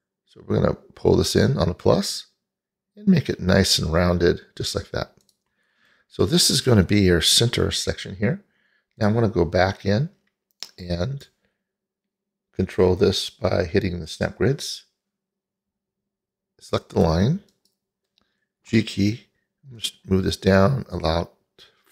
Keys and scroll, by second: 18.8 g.